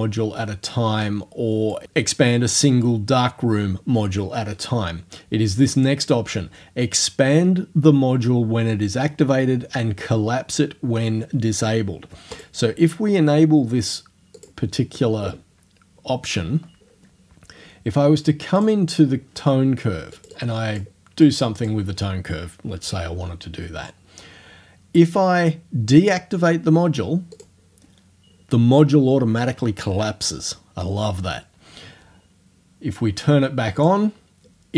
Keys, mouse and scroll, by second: 1.1 click, 12.3 click, 14.4 click, 18.6 click, 20.2 click, 21.1 middle click, 21.3 click, 27.3 click, 33.8 click.